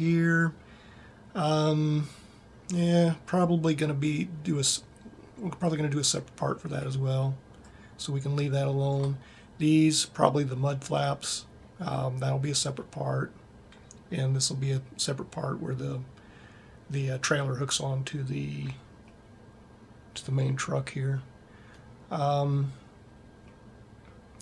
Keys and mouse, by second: 7.6 click, 10.4-19.5 middle drag.